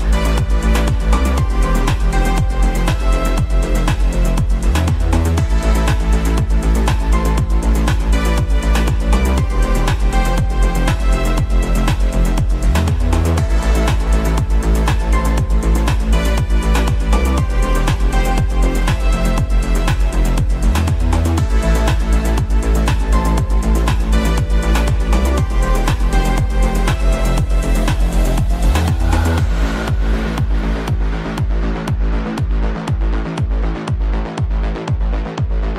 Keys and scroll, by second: 5.8 f, 7.2 ctrl+shift+z, 8.1 Delete, 14.2 shift+Page_Up, 21.1 shift+F2, 35.0 F3.